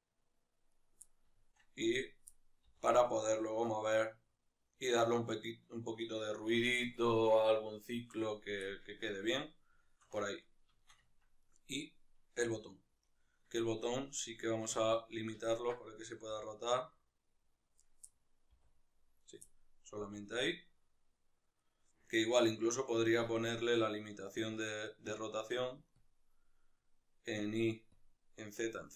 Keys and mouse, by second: 0.6 right click, 0.8 middle click, 1.7 right click, 2.0-5.8 middle drag, 2.5 r, 5.8 right click, 8.4-11.1 middle drag, 11.1 right click, 11.5-13.0 middle drag, 12.2 r, 13.0 right click, 14.5 click, 14.8 click, 15.2-17.8 ctrl+middle drag, 16.1 r, 17.8 right click, 17.8-19.1 middle drag, 18.4 r, 19.1 right click, 19.2-21.6 middle drag, 19.8 r, 21.6 right click, 25.0 click, 27.2 click.